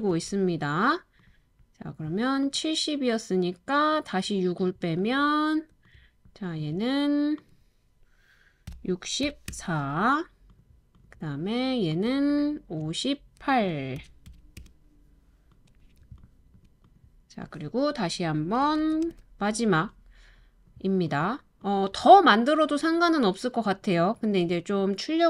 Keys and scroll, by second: 0.1 super+v, 8.7-9.2 typing, 9.5 Return, 14.0-14.3 typing, 14.6 Return, 18.8 super+c, 19.0 super+v.